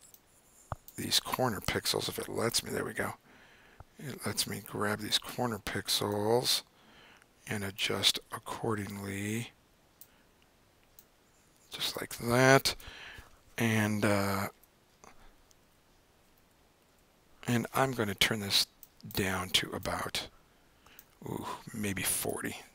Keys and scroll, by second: 2.0 super+z, 14.3 Left, 14.5 Left, 15.6 Down, 16.4 Down, 16.9 Right.